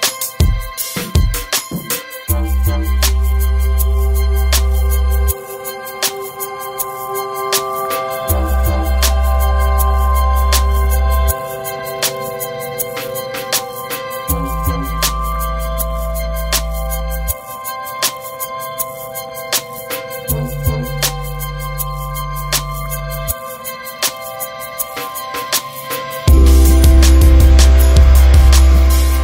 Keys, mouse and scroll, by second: 2.6 click, 3.0 right click, 4.2 scroll down 1, 4.5 right click, 11.7 click, 15.9 right click, 17.8 click, 23.2 right click, 26.0 click, 27.0 right click.